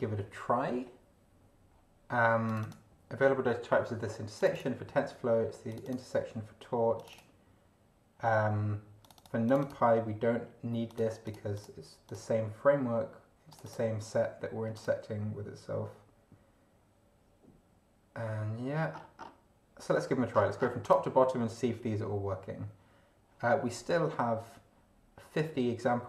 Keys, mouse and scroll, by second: 2.5 click, 4.3 click, 5.7 click, 6.9 click, 9.0 click, 9.7 click, 10.9 click, 11.2 click, 12.1 click, 13.5 click, 14.7 click, 18.9-19.4 scroll down 1, 20.3-20.8 scroll down 1, 20.8 click.